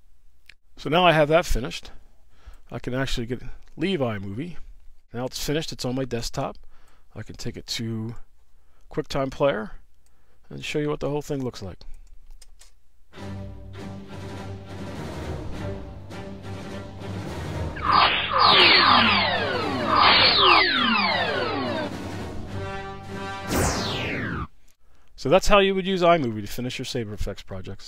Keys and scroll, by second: 12.4 space.